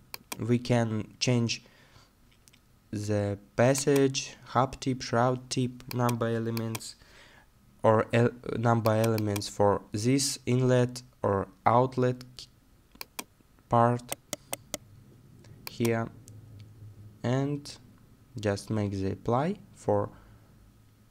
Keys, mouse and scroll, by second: 14.1 right click.